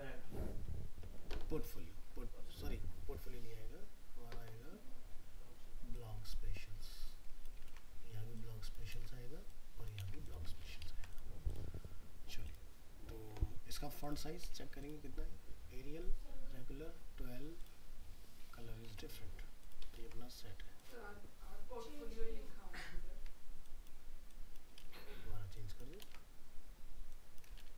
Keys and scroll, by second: 7.7 ctrl+c, 8.9 ctrl+v, 10.6 ctrl+s, 18.9 alt+Tab, 20.0 ctrl+s, 24.8 ctrl+c, 26.0 ctrl+v.